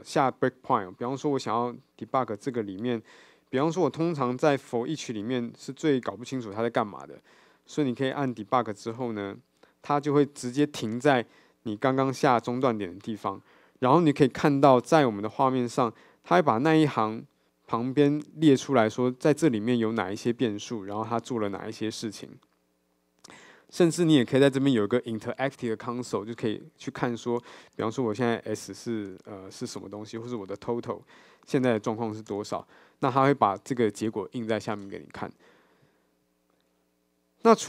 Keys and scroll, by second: 2.1 super+b, 4.8 super+F8, 24.3 alt+F8.